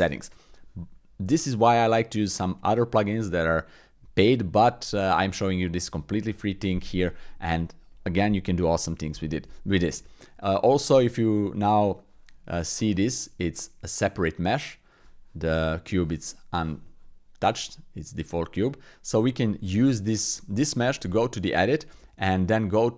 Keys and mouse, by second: 7.3 middle click, 8.2 middle click, 9.6 middle click, 10.2 middle click, 10.6 middle click, 11.8 click, 14.3 click, 18.6-20.8 drag, 20.8 Tab, 21.8 w.